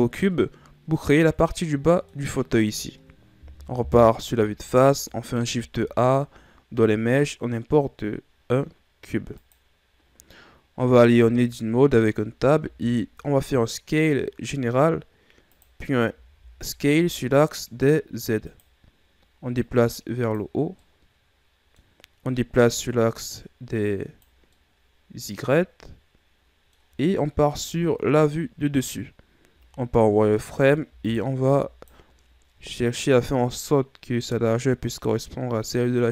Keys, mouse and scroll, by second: 1.1-3.7 middle drag, 3.7 KP_1, 5.6 shift+a, 10.3-11.0 scroll up 3, 11.0 Tab, 11.8-12.6 scroll down 5, 12.6 s, 16.1 s, 19.5-20.8 drag, 20.8-22.6 middle drag, 22.6-24.5 drag, 24.5-27.6 middle drag, 27.6 KP_7, 29.5 z, 30.5 right click, 30.9 b, 32.8-35.9 drag.